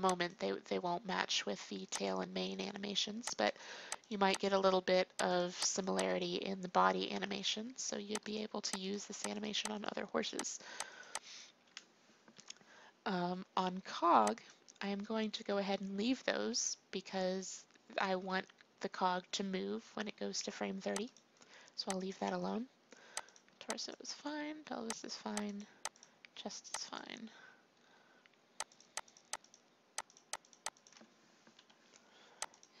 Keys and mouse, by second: 0.1-1.4 drag, 1.8-7.1 drag, 7.1 Delete, 12.3 Delete, 31.5 Delete.